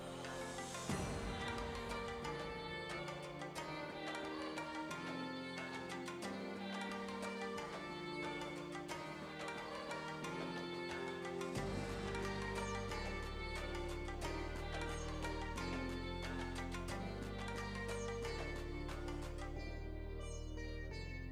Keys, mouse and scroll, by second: 1.3 space, 10.3 space, 12.2-14.2 drag, 14.2-14.8 scroll up 3, 14.8-16.7 shift+middle drag, 16.7 click, 19.8-21.3 drag.